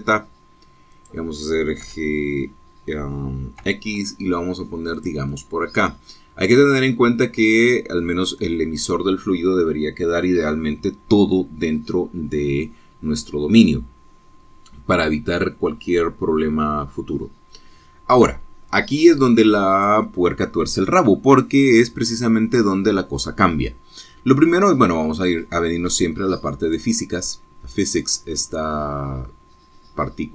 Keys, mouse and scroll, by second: 0.1 g, 0.8 z, 2.0 click, 2.9 g, 4.7 x, 6.0 click, 6.3-9.2 middle drag, 9.2 click, 20.8 click, 27.7 click.